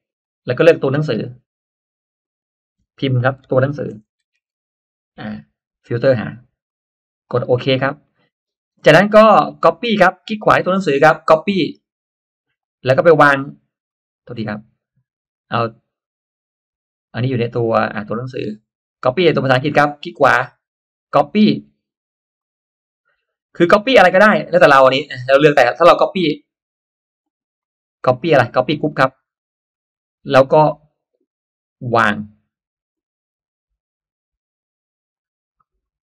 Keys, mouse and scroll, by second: 0.1 click, 0.7 click, 2.1 click, 3.3-4.9 typing, 6.6-7.5 drag, 8.0 click, 9.8 right click, 12.3 click, 13.8 click, 16.6 click, 18.3-19.3 drag, 19.7 right click, 22.3 click, 25.5 drag, 27.1-28.1 right drag, 29.1 click, 32.9 right click, 35.1 click.